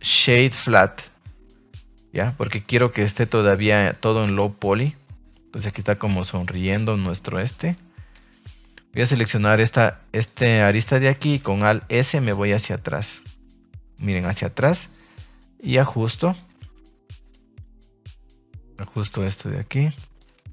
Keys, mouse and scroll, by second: 2.6 Tab, 3.4 a, 3.5 a, 3.7-5.0 middle drag, 5.4-5.7 middle drag, 5.9 shift+middle drag, 6.3 Tab, 6.5 middle click, 6.7 middle click, 7.3-7.7 middle drag, 8.1 right click, 9.5 click, 10.7 middle click, 11.4 alt+s, 14.5 click, 15.6 click, 16.3 right click, 17.2 click, 17.6 right click, 17.8 g, 18.4 click, 18.9 right click, 19.1 g, 19.7 click, 20.1 right click, 20.3 g.